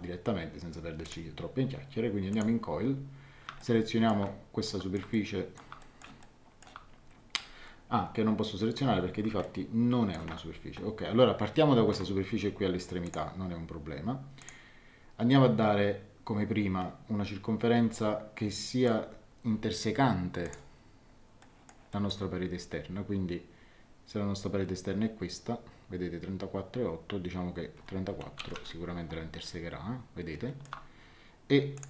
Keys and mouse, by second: 1.0 click, 2.3 click, 3.6 shift+middle click, 4.6 middle click, 5.1 shift+middle click, 6.2 shift+middle click, 9.4 shift+middle click, 13.0 click, 14.4 click, 17.9 middle click, 20.4 click, 21.4 middle click, 28.3 KP_3, 28.5 KP_4, 28.6 Return, 29.4 middle click, 31.7 click.